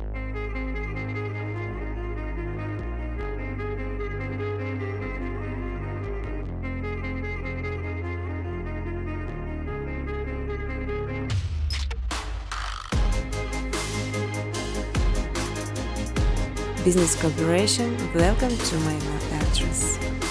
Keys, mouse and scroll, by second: 2.8 click, 3.1-7.8 typing, 5.1 Tab, 7.5 Return, 10.2-11.8 typing, 10.3 click, 12.3 click, 12.5 click, 15.6 click, 16.5 click, 17.1 click, 18.0-18.4 typing, 19.1 Tab, 19.9-20.3 typing.